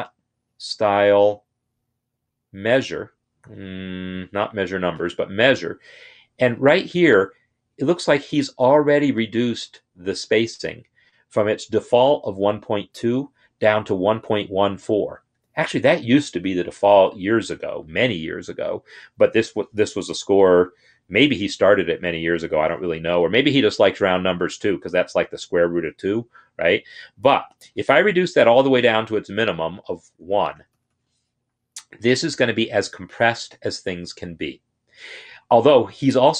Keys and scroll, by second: 28.9 Down, 29.2 Down, 29.3 Down, 30.0 Down.